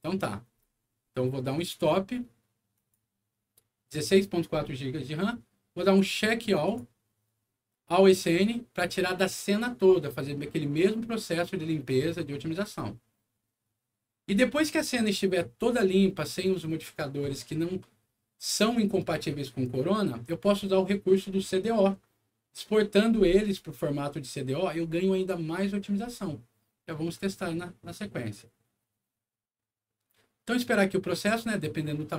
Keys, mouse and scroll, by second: 1.5 click, 2.7 click, 6.1 click, 6.6 click, 8.1 click.